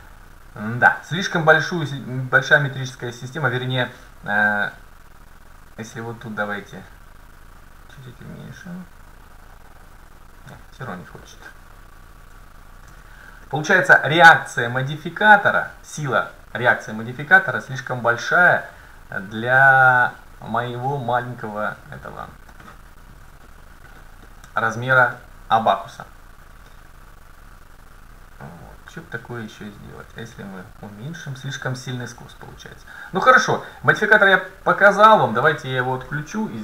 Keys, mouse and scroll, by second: 2.3-4.2 drag, 4.8-8.3 drag, 11.3-13.1 drag, 13.5-14.5 middle drag, 14.8-16.9 drag, 20.4 middle click, 20.9 scroll down 1, 22.3-23.4 scroll up 1, 23.6-25.2 scroll down 1, 27.0-32.8 drag, 31.0-33.4 middle drag, 34.8-36.6 drag, 35.8-36.1 scroll down 1, 36.1 middle click.